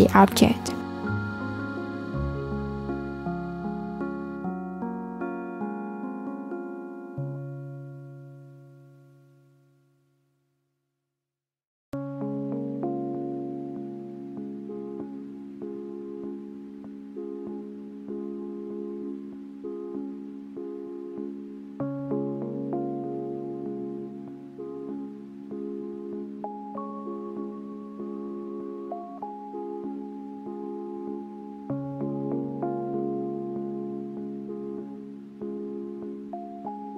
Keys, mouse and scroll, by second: 2.5-6.2 drag, 9.7 click, 10.6-13.6 drag, 22.0-22.8 drag, 22.8 s, 24.3 click, 27.8-30.8 drag, 31.7 click, 32.6 r, 34.8 click.